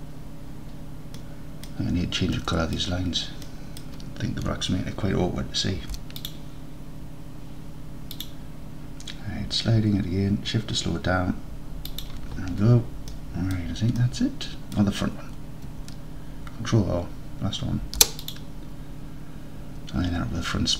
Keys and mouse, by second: 1.2 middle click, 2.4 middle click, 3.5 middle click, 6.2 ctrl+r, 12.0 shift+click, 13.4 middle click, 14.2 middle click, 17.9 ctrl+r.